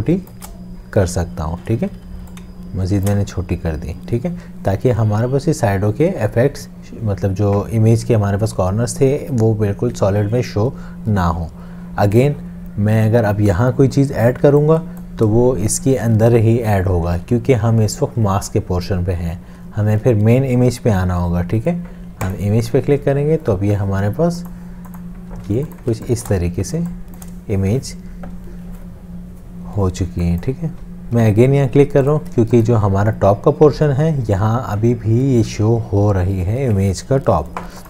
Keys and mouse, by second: 2.4 alt+click, 14.4 m, 17.1 ctrl+z, 25.4 space, 30.1 space, 32.4 space.